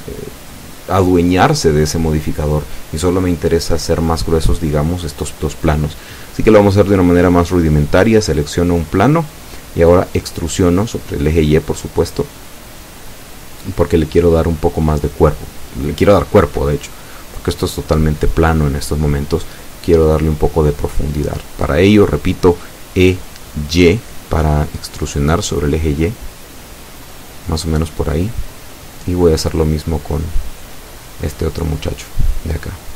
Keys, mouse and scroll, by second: 0.7 scroll up 2, 1.8 click, 4.3 click, 8.6 click, 9.7-11.8 middle drag, 11.9 scroll up 1, 12.5-13.5 shift+middle drag, 13.7 shift+z, 14.8 right click, 16.2 l, 17.5 z, 23.1 z, 23.6 scroll down 1, 24.0-25.0 middle drag, 28.3 z, 28.7-30.1 middle drag, 30.2-30.5 scroll up 1, 31.6-32.8 middle drag.